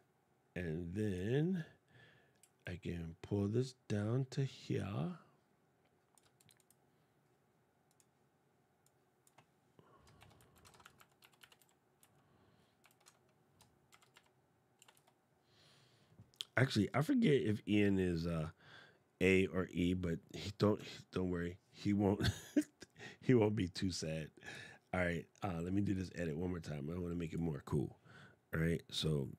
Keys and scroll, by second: 9.9 shift+i, 10.6 shift+a, 13.6 shift+g.